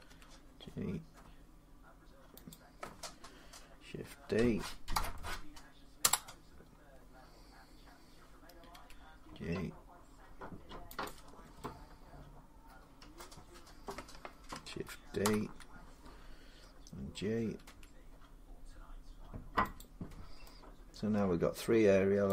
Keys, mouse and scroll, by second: 2.3 click, 4.7 shift+d, 5.8 Return, 8.5 g, 9.7 click, 10.8-11.9 drag, 12.9 middle click, 12.9 scroll up 1, 15.0 shift+d, 15.9-17.4 scroll, 17.4 g, 19.6-21.1 drag, 21.3 middle click, 22.2 click.